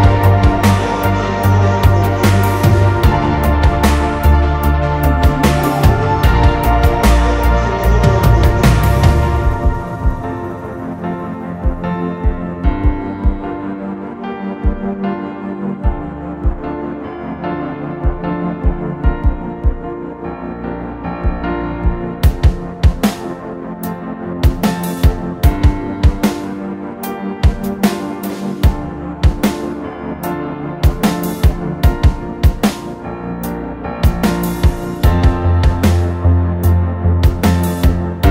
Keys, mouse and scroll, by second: 3.6 m, 5.4 m, 7.2 typing, 8.4 scroll up 1, 8.4 space, 8.6 middle click, 9.7 scroll down 1, 10.7 typing, 14.5 scroll up 1, 14.8 middle click, 15.2 scroll up 1, 15.3 middle click, 16.7 scroll down 1, 17.0 scroll up 1, 17.3 scroll down 1, 18.0-19.9 scroll, 19.9 scroll up 1, 20.3 middle click, 20.6 scroll down 1, 20.9 scroll up 1, 21.7 middle click, 23.0 scroll up 1, 23.3 middle click, 24.6 m, 27.4 middle click, 27.7 scroll down 1, 28.0 scroll up 1, 28.3 middle click, 28.7 scroll up 1, 29.0 middle click, 29.6 scroll up 1, 29.7 middle click, 33.2 scroll down 1, 33.4 middle click, 33.9 scroll down 1, 35.0 m, 37.4 scroll down 1, 37.5 middle click, 37.8 scroll up 1, 38.2 middle click.